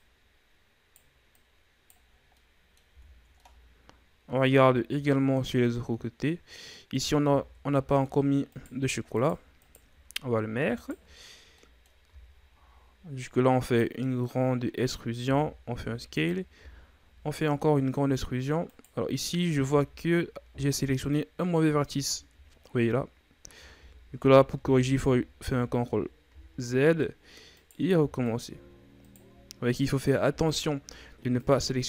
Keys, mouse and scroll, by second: 1.3 right click, 2.1 scroll down 4, 2.3 middle click, 2.9 Tab, 3.4-4.6 middle drag, 4.6 ctrl+scroll up 3, 5.1-6.6 middle drag, 6.6-6.9 scroll up 1, 6.9 right click, 7.2 Tab, 7.7 middle click, 8.5 right click, 9.1 shift+right click, 9.6 shift+right click, 10.7 shift+right click, 11.5 middle click, 12.1 e, 14.2-15.2 scroll up 1, 15.2 s, 16.6 e, 19.6 z, 20.1-23.8 middle drag, 23.8 ctrl+z, 24.1 ctrl+z, 24.6 ctrl+z, 24.9 ctrl+z, 26.2 z, 26.6 scroll up 1, 26.6 middle click, 27.5 right click, 28.3 shift+right click, 29.0 shift+right click, 30.4 e, 31.7-31.8 shift+scroll down 2.